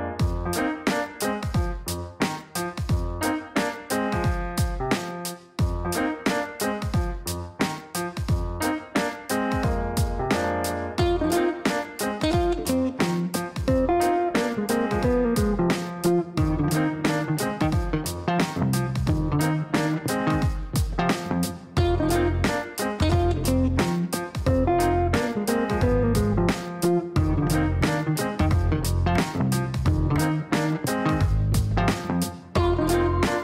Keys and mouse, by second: 2.1 click, 4.4 click, 7.0 click, 8.3 click, 13.0 click, 16.5 KP_8, 16.6 KP_0, 17.5 Return, 21.5 click, 23.4 click, 25.5 click, 26.2 click, 27.5 click, 28.2 click, 29.1 right click, 30.3 click.